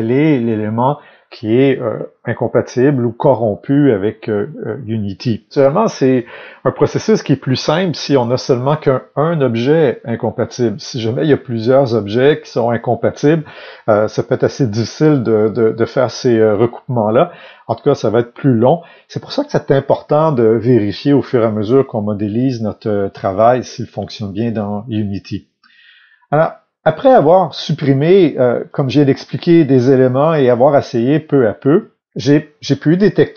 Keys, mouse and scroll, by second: 28.6-32.8 drag, 32.1-32.8 scroll down 2, 32.8-33.3 middle drag.